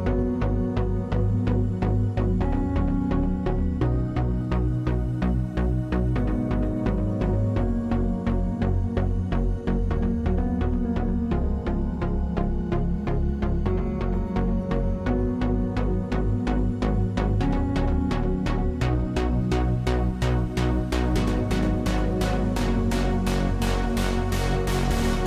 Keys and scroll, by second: 2.2-4.2 scroll, 24.9-25.2 typing.